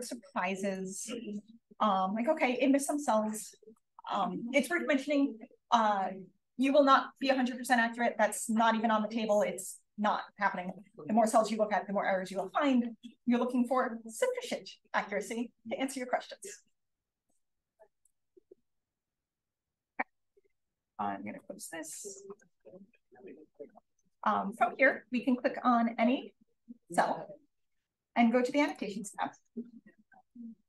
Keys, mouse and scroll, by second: 0.4 click, 1.2-2.4 scroll up 1, 2.4-3.2 scroll up 1, 3.2-4.5 scroll down 1, 4.5-6.9 scroll down 1, 6.9-12.0 scroll down 1, 12.0-16.9 scroll down 1, 16.9-17.7 scroll down 1, 17.7 click, 17.7 scroll down 1, 18.3-19.6 scroll up 1, 19.0 click, 19.6-20.6 scroll down 1, 20.6-22.2 scroll down 1, 22.2-22.6 scroll down 1, 23.5 click, 24.5 click, 25.7 click, 28.6 click, 29.8-30.6 drag.